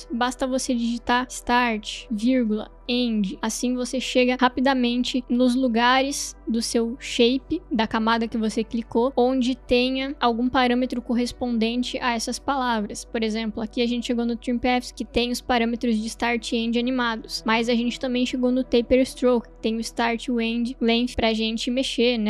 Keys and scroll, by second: 1.0-3.5 typing.